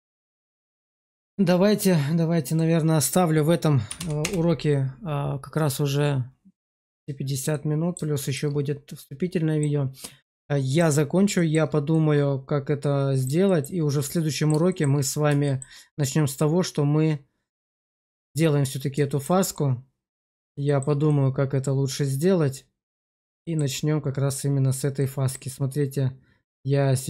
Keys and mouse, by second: 0.0 middle click, 0.9 shift+middle click, 2.5-4.2 drag, 7.4 middle click, 8.1 shift+middle click, 8.9 middle click, 10.3 shift+middle click, 11.3 shift+middle click, 11.8-13.1 middle drag, 13.4 shift+middle click, 13.9 middle click, 14.6 shift+middle click, 15.4 shift+middle click, 19.0 shift+middle click, 19.4 middle click, 20.6 shift+middle click, 21.0-23.1 middle drag, 23.1 shift+click, 23.3 shift+click, 24.9 click.